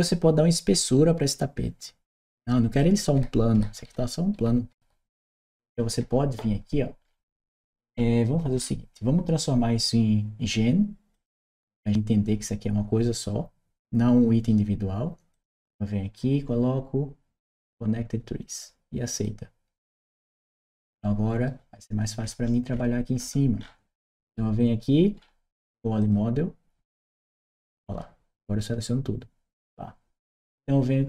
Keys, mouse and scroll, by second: 2.6-6.0 right drag, 10.8 click, 15.1 click, 17.4 click, 19.0 click, 25.8 click.